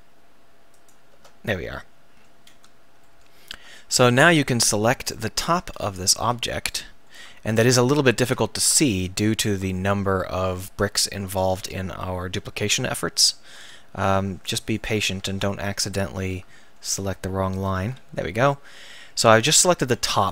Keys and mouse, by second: 3.1 click, 3.9-6.2 right drag, 6.2 z, 8.5 ctrl+z, 9.4 right click, 15.3 ctrl+z, 18.1 z.